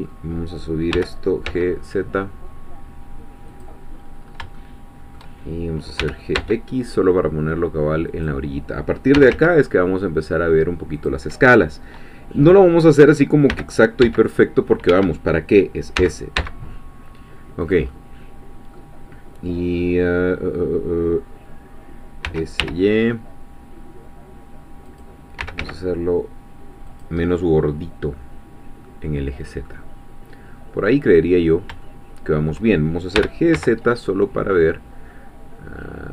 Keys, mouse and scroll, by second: 0.9 g, 1.5 z, 3.5 click, 4.0-4.6 scroll up 3, 4.6 shift+middle click, 6.0 g, 6.4 x, 8.1-9.2 drag, 9.2 s, 9.3 z, 11.0-13.5 drag, 13.5 g, 14.0 x, 16.0 s, 17.6 click, 17.9-22.2 middle drag, 22.2 s, 22.6 y, 24.9 click, 25.4 s, 25.6 z, 26.9 click, 27.2-29.8 middle drag, 30.8 scroll up 1, 31.5 scroll down 1, 31.8 shift+middle click, 33.2 g, 33.6 z.